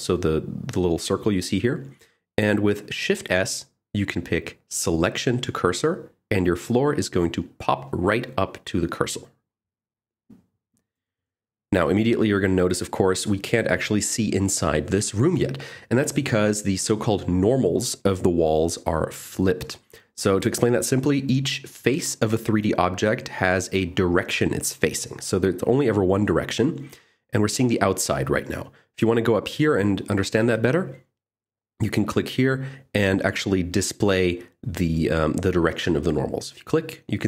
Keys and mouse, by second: 4.8 shift+s, 9.3 middle click, 22.6 click, 24.3 click, 26.1 click, 30.1-32.8 drag, 33.3 click, 34.7 middle click.